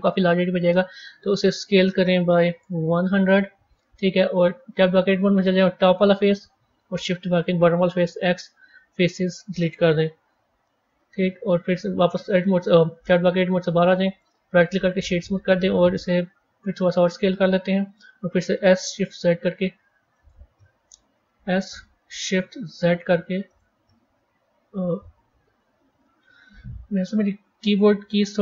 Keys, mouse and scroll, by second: 1.1 s, 4.7 Tab, 5.4 click, 6.2-7.3 middle drag, 7.3 shift+click, 8.0 x, 10.1 KP_1, 10.6-11.7 scroll down 1, 11.7 a, 12.9 Tab, 13.8-14.4 middle drag, 14.4-16.3 right drag, 16.3 s, 18.5 s, 24.2-24.9 scroll down 2, 24.9-26.8 middle drag, 26.8 s.